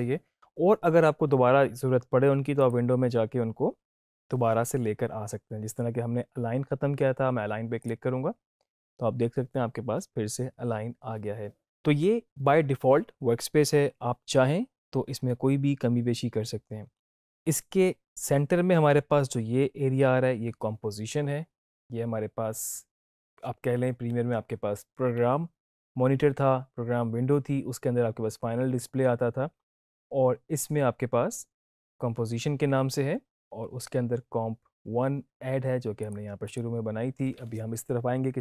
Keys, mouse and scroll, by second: 2.6 click, 7.7 click, 35.9 click.